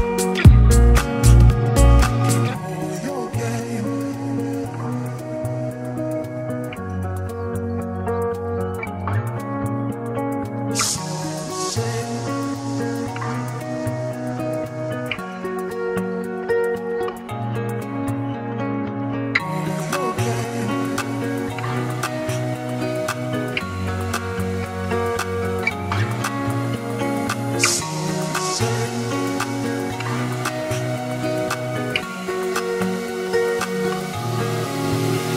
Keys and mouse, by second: 3.2 alt+middle click, 10.3 alt+middle click, 16.1 alt+middle click, 22.6 middle click, 23.3 middle click, 26.3 alt+middle click, 29.4 alt+middle click, 35.0 alt+middle click.